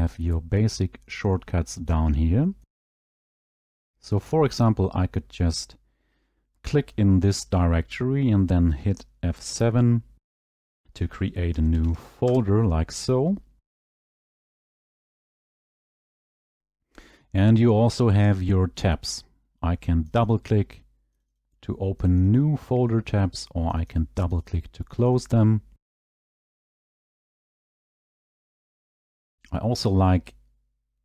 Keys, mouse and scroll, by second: 3.7 right click, 4.7 click, 10.2 F7, 11.4-12.2 typing, 12.2 Return, 14.6 right click, 15.5 Delete, 16.0 Return, 22.3 click, 23.8 click, 24.0 click, 24.4 click, 24.6 click, 25.0 click, 25.2 click, 29.5 click.